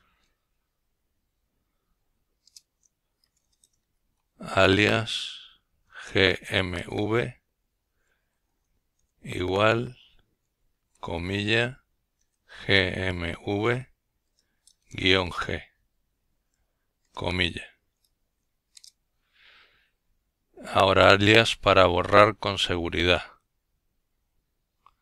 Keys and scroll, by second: 0.0-0.9 typing, 2.5 typing, 4.4 typing, 5.7-6.9 typing, 8.0-9.0 typing, 10.3-11.0 typing, 12.2 typing, 19.4-23.0 typing, 24.8 typing.